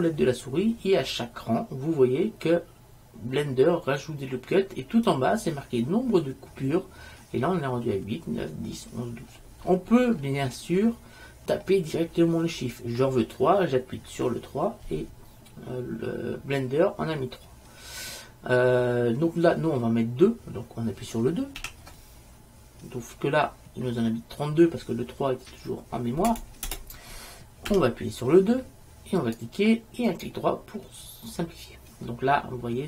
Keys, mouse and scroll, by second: 9.7-19.8 middle drag, 27.8-28.9 scroll up 1, 30.0 click, 32.2-32.8 middle drag.